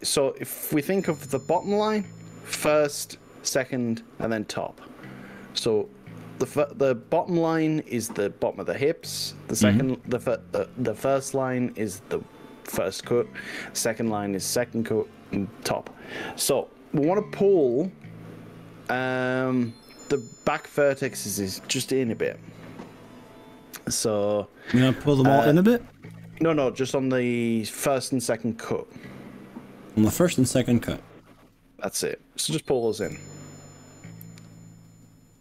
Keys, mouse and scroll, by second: 7.7-9.0 drag, 10.3-11.9 drag, 13.1 click, 13.9 click, 14.5-14.9 drag, 15.7-16.1 drag, 16.3 drag, 16.7-17.1 drag, 17.7 click, 20.8-25.1 drag, 26.2 g, 27.2 click, 28.1 click, 28.9-30.3 drag, 30.5-30.9 drag, 32.1 g, 33.1 y.